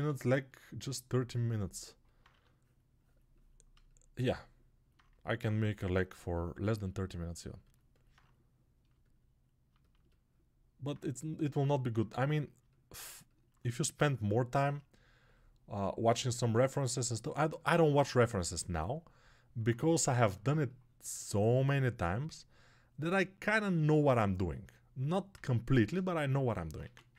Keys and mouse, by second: 0.0 alt+shift+right click, 0.1-27.1 alt+drag, 27.0 ctrl+1.